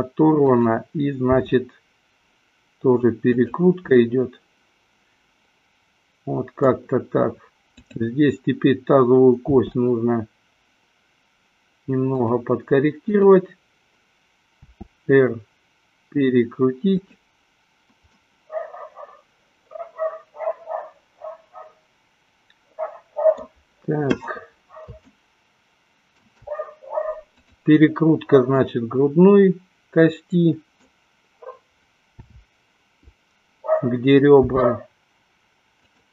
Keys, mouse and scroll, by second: 1.7 r, 4.4-7.0 middle drag, 8.0-8.7 drag, 9.8 r, 13.3 click, 14.9 r, 18.5-23.8 middle drag, 25.3-26.4 shift+middle drag, 27.4 click, 28.8-31.3 middle drag, 32.5 KP_7, 34.4 r.